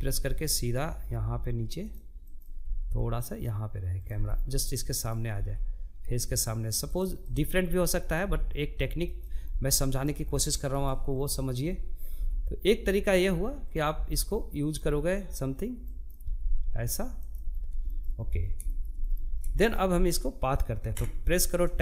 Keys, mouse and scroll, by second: 0.8 click, 1.1 g, 2.7-3.8 middle drag, 3.8 g, 5.8 click, 6.2 middle click, 6.6 g, 7.8 middle click, 8.7-9.1 scroll down 1, 9.1 shift+middle click, 9.7 click, 10.6 g, 12.2 click, 12.3 g, 13.7 click, 14.5 click, 14.6 g, 15.9 scroll down 1, 16.3 shift+middle click, 16.8-17.1 scroll up 3, 17.1 shift+middle click, 17.7 scroll up 2, 17.9-19.3 shift+middle drag, 19.3 Tab, 20.2-21.8 shift+middle drag.